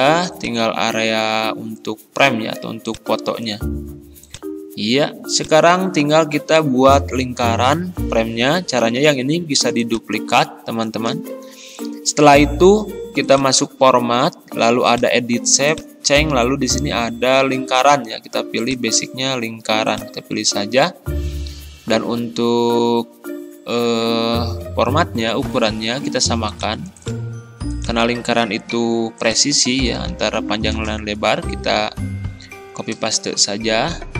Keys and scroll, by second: 28.8 ctrl+c, 30.1 ctrl+v, 30.8 Return.